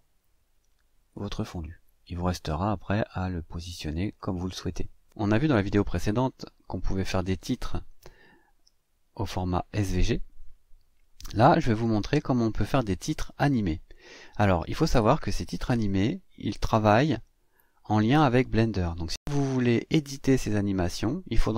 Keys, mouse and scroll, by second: 2.2-4.1 drag, 12.8 click, 13.9 click, 15.8-17.3 drag.